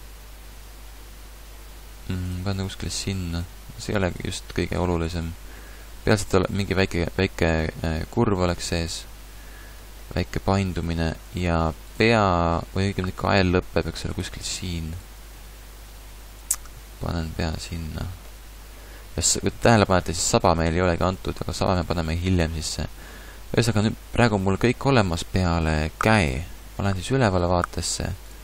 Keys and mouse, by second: 2.3 click, 3.0 g, 4.2 g, 7.0 g, 12.1 g, 14.2 click, 15.1 g, 16.8 click, 16.9 a, 20.1 a, 26.3 KP_7.